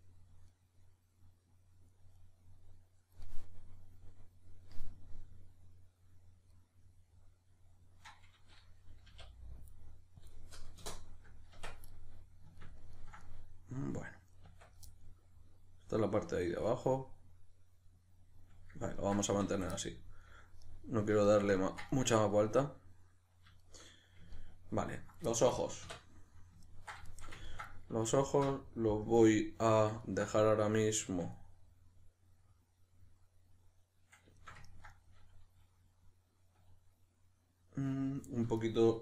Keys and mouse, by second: 9.1 k, 14.4 Tab, 14.9-28.1 middle drag, 19.3 a, 25.8 \, 28.1 alt+right click, 29.1 KP_Decimal, 29.4-39.0 middle drag.